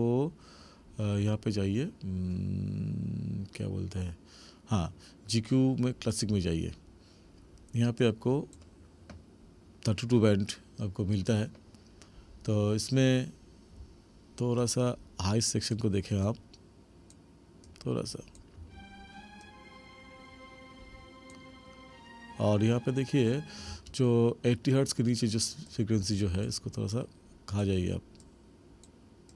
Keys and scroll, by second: 18.6 space, 23.7 space.